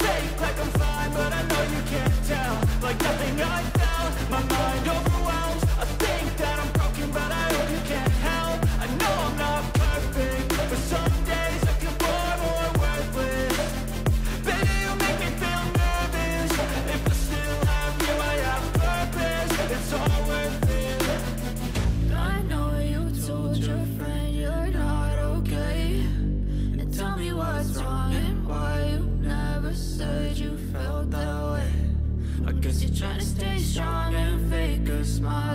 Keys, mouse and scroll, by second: 0.7 ctrl+z, 5.5 double click, 6.2-7.4 scroll down 11, 7.5-8.5 scroll up 10, 11.1 scroll up 1, 13.0 ctrl+-, 13.6 ctrl+-, 13.9 ctrl+=, 15.1-15.5 scroll up 5.